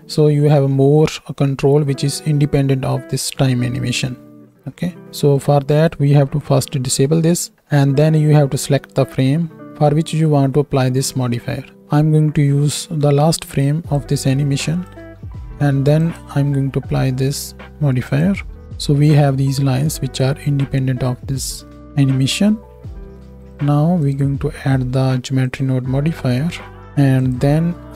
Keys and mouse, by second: 6.9 m.